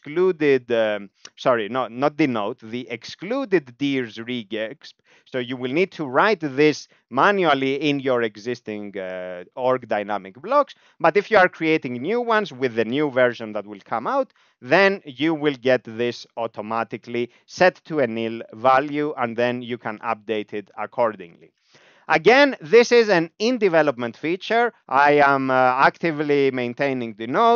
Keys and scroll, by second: 0.1-1.9 typing, 2.2 Up, 2.4 Up, 3.1 Right, 4.8 ctrl+alt+space, 5.8 ctrl+g.